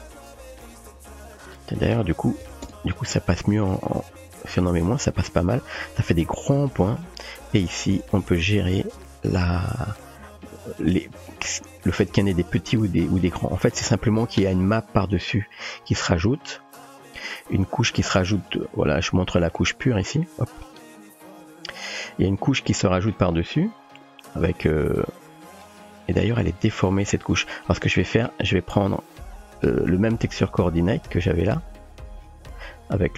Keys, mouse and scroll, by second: 1.1-3.2 drag, 7.1 middle click, 8.3-10.3 drag, 10.9-11.4 shift+middle drag, 12.2 shift+middle click, 16.9-18.3 drag, 19.2 middle drag, 19.7 middle click, 21.4 KP_7, 22.8-23.1 shift+middle drag, 28.4 middle click, 29.1-29.6 drag, 29.6 typing, 30.2 click, 30.9 typing.